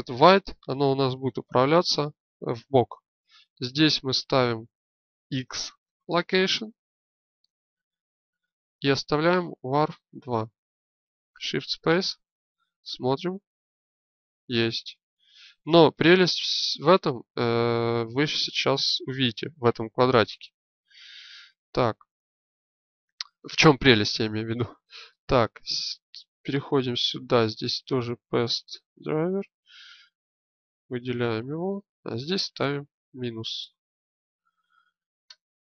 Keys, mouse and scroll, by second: 11.1 shift+space, 19.5 alt+g, 20.6 shift+space.